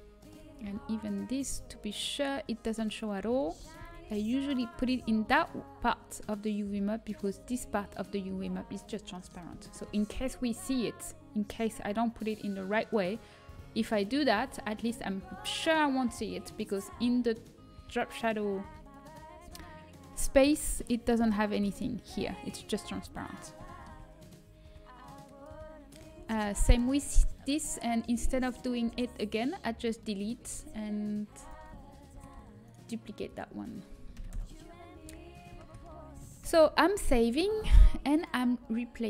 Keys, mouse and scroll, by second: 1.2-4.1 middle drag, 4.1 a, 4.1 s, 5.0 g, 24.9-26.5 drag, 26.5 Tab, 28.8 Delete, 30.6 Delete, 31.3 click, 32.6 shift+d, 36.4 ctrl+s.